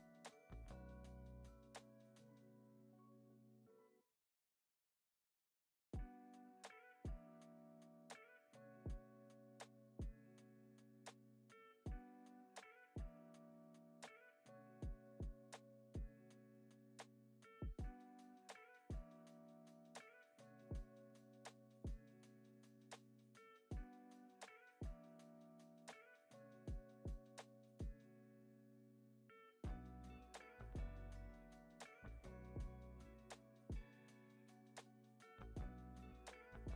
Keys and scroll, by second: 7.5 alt+q, 7.7 alt+q, 10.2 alt+q, 10.5 super+s, 11.2 space, 17.8 x, 18.7 z, 21.6 super+s.